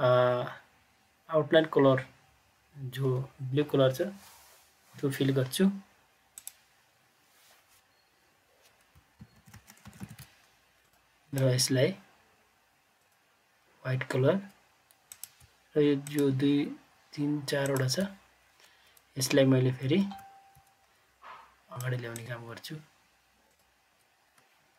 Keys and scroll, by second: 9.2 ctrl+Page_Down, 9.4 ctrl+Page_Down, 9.6 ctrl+Page_Down, 9.8 ctrl+Page_Down, 10.0 ctrl+Page_Down, 19.8 ctrl+Page_Up, 20.1 ctrl+Page_Up.